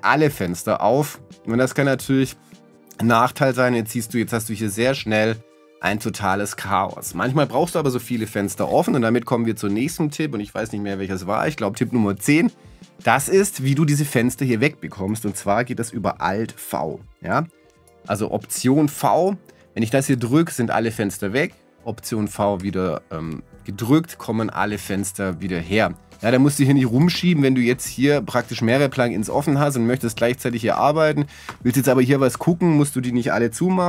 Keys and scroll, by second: 20.1 alt+v, 22.6 alt+v.